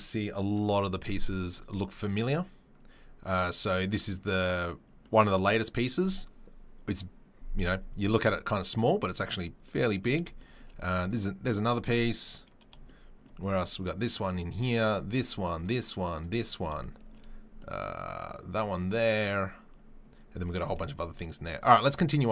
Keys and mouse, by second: 0.0-3.2 middle drag, 3.2 click, 3.3-22.3 middle drag, 11.0 click, 13.7 click, 14.8 click, 15.5 click, 18.3 click.